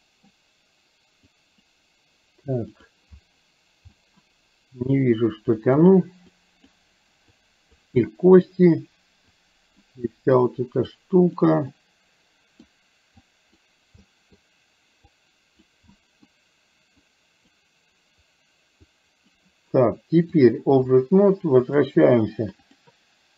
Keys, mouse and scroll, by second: 0.0 middle click, 1.5 click, 2.7 click, 4.0 middle click, 5.1 click, 6.3 click, 7.3 click, 8.1 middle click, 9.5 click, 10.2 middle click, 11.0 click, 11.7-12.7 middle drag, 13.2 click, 14.1 middle click, 15.2 click, 15.8 middle click, 17.0 click, 19.0 click, 20.5 click, 21.7 click.